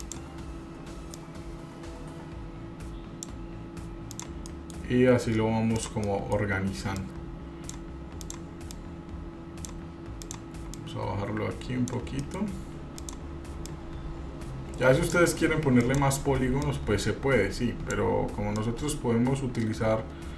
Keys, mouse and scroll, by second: 0.2 click, 1.3-3.4 drag, 4.3 click, 4.7 middle click, 5.0 scroll up 1, 6.0 click, 6.2 middle click, 7.2 click, 8.4 click, 8.9 click, 10.4 click, 10.9-12.1 drag, 12.4 middle click, 13.2 click, 13.8-15.4 drag, 16.0 click, 16.9-18.1 drag, 18.7-20.3 drag.